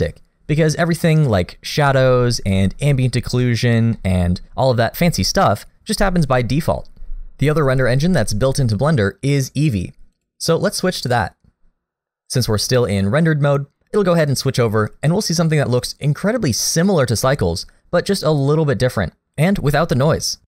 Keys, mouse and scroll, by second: 3.9 middle click, 10.1 click, 16.9 middle click.